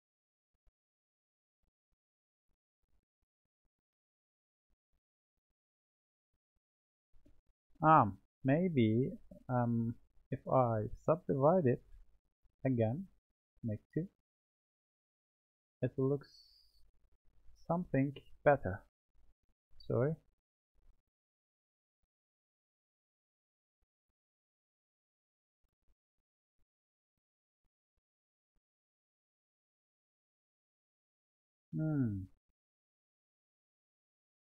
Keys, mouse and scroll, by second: 4.4-7.6 drag, 7.6 Tab, 9.2 a, 9.8-11.2 right drag, 13.8-14.8 drag, 16.0-17.2 drag, 17.2 Tab, 18.3-19.8 drag, 19.8 Tab, 24.1-27.1 middle drag.